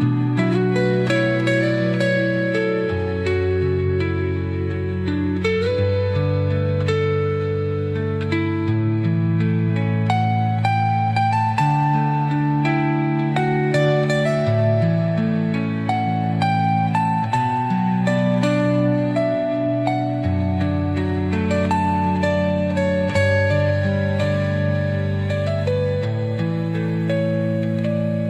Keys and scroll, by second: 12.0 space.